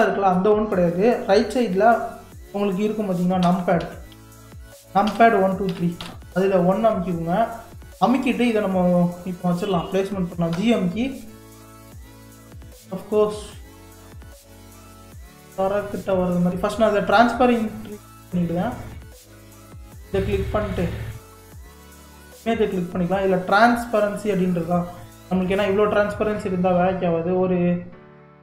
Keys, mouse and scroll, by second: 3.4-5.7 typing, 7.2 scroll up 2, 7.9-8.8 scroll down 1, 9.0-10.5 shift+middle drag, 10.5 g, 19.7 click, 22.1 click, 23.6 click, 24.9-27.9 drag.